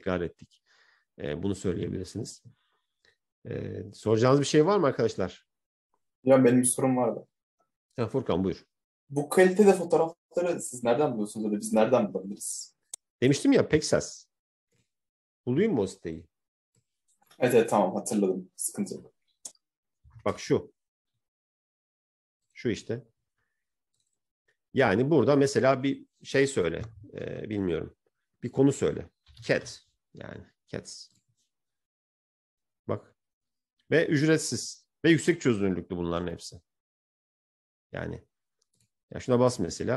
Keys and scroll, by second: 19.5-20.6 typing, 29.3-30.4 typing.